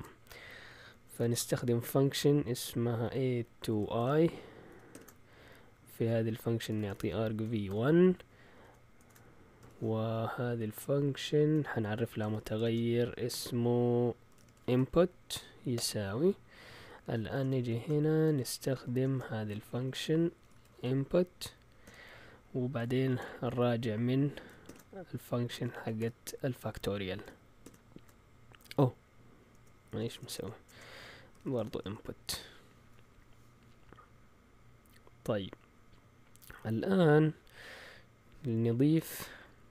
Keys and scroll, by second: 0.9 Escape, 1.3 o, 3.0-4.9 typing, 6.3-9.6 typing, 10.1-11.2 Left, 11.9-17.9 typing, 19.5 Right, 19.7 Right, 20.1-26.5 typing, 27.6 typing, 29.3-32.3 typing, 38.5 Escape, 38.9 typing.